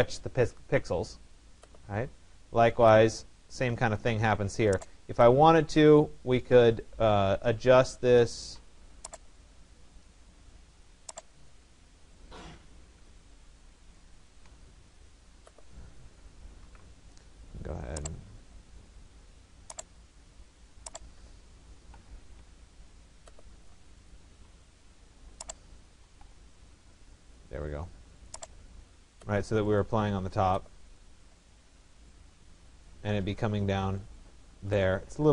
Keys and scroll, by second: 16.2 ctrl+z, 21.3 9, 21.9 0, 22.2 Tab, 26.2 0, 26.4 Tab.